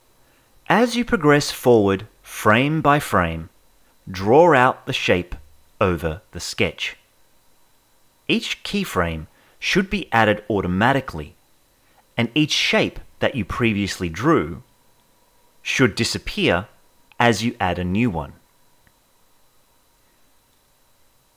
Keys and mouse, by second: 0.3 Right, 0.6 click, 1.4 click, 1.8 ctrl+z, 2.0 click, 2.5 Right, 2.7 click, 3.9 Right, 4.3 middle click, 4.5-5.5 drag, 5.7 Right, 6.1 click, 7.1 Right, 7.2 middle click, 7.4-8.5 drag, 8.8 click, 9.1 click, 9.4 Right, 9.5 middle click, 9.7-11.2 drag, 11.4 Right, 11.5 middle click, 11.9 click, 13.0 click, 13.5 Right, 13.7 middle click, 14.0 middle click, 14.3 click, 15.2 click, 15.8 click, 16.2 Right, 16.3 middle click, 16.5-17.5 drag, 17.8 Right, 17.9 middle click, 18.1 click, 18.6 click, 19.0 Right, 19.0 middle click, 19.2 click, 19.9 Right, 20.0 middle click, 20.3 click, 21.1 Right, 21.2 middle click.